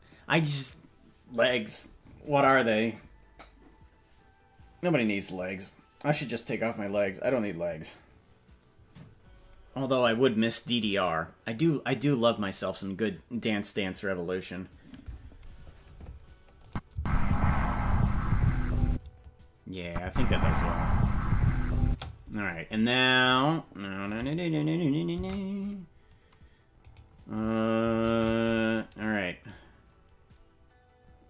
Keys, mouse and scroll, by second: 16.7 click, 16.9 space, 18.9 space, 19.8 click, 20.0 space, 21.8 space, 25.2 ctrl+Tab, 26.9-28.0 right drag, 28.0 shift+`.